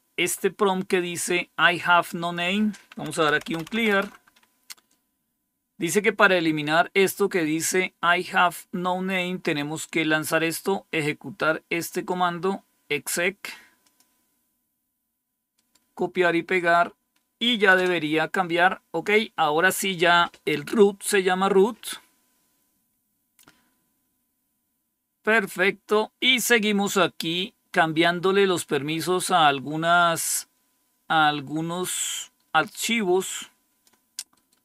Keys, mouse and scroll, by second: 2.1 click, 2.8-4.1 typing, 10.2-12.0 drag, 12.9 right click, 13.7 click, 15.4 right click, 16.5 click, 17.6 Return, 23.5-25.7 scroll down 2, 25.7-30.1 scroll up 2, 30.1-33.8 drag, 34.2 right click.